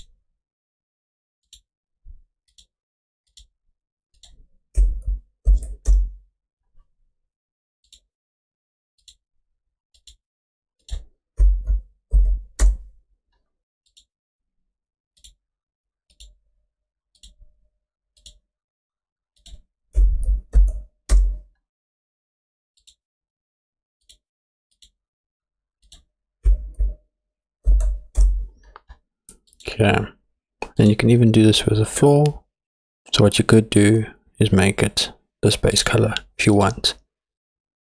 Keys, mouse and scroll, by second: 1.5 click, 2.5 click, 3.4 click, 7.8 click, 9.0 click, 10.0 click, 16.1 click, 17.2 click, 20.3 click, 22.8 click, 24.0 click, 24.8 click, 29.5 click, 30.8 click.